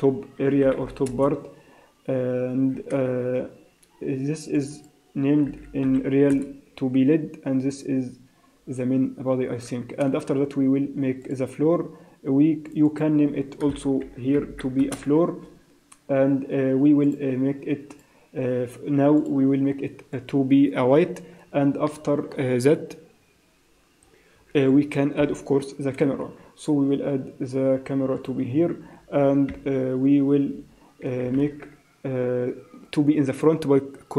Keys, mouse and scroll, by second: 4.5 click, 4.7 click, 9.9 shift+a, 12.6 click, 12.8 click, 14.4 o, 17.0 click, 17.9 click, 19.1 click, 21.8 middle click, 23.4-24.8 scroll down 11, 24.6 scroll up 5, 25.1 KP_1, 26.3 shift+a, 29.4 KP_0, 30.5 KP_0, 31.3 ctrl+alt+KP_0.